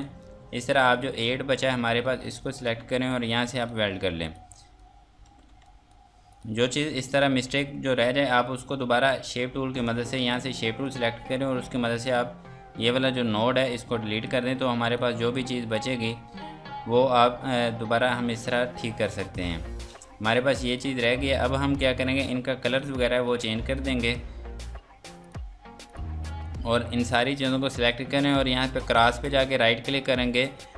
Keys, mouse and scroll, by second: 0.3 F3, 0.9 click, 2.5 shift+click, 4.1 F2, 4.3 click, 5.2 Escape, 5.6 click, 6.6 F2, 6.8 click, 10.8 click, 14.1 Delete, 14.9 click, 18.3 ctrl+space, 18.7 scroll down 1, 19.2 Escape, 19.5 F3, 29.9 right click.